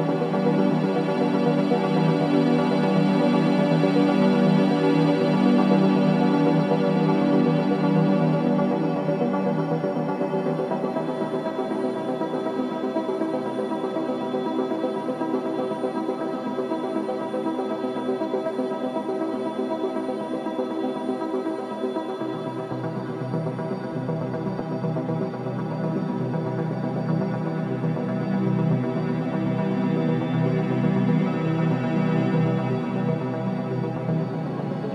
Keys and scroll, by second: 0.1 4, 2.1 3, 9.0 4, 19.8 3, 20.6 ctrl+d, 20.7 Escape, 22.2 ].